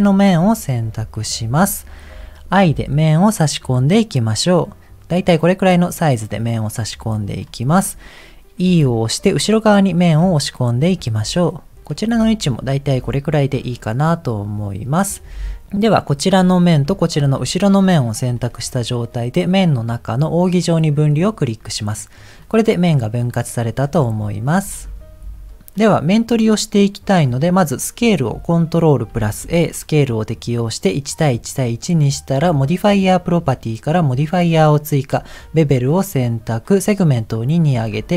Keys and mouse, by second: 1.2 KP_1, 6.1-7.3 middle drag, 8.6 e, 12.3-13.6 middle drag, 16.4 middle click, 17.1 shift+click, 19.1-21.1 drag, 22.1 middle click, 23.2 middle click, 24.8 Tab, 29.0 ctrl+a, 32.6 click, 35.4 click, 36.9 click.